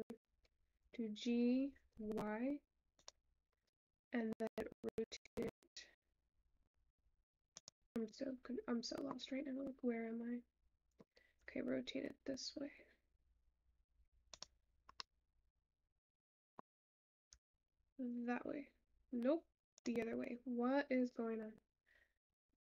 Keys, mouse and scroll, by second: 3.1 g, 12.3 r.